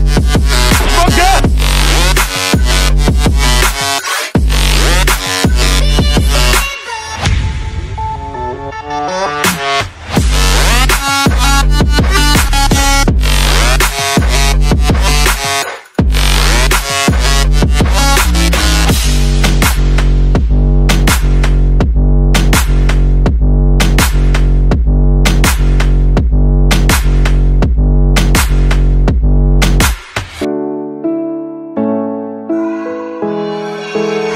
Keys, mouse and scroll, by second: 2.8 click, 4.0 Return, 4.1 Return, 5.9-6.8 typing, 7.8-9.5 typing, 12.0-14.8 typing, 16.9-22.9 typing, 23.9-26.6 typing, 28.6 click, 29.5 right click, 33.6 click.